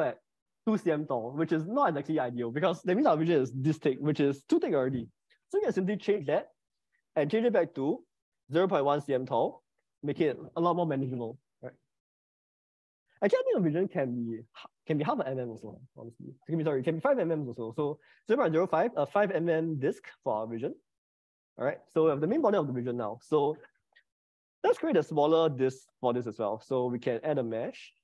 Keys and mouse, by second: 6.4-9.3 drag, 13.1-18.7 drag, 15.6 BackSpace, 20.3 middle click, 23.1 click, 26.5-28.0 drag.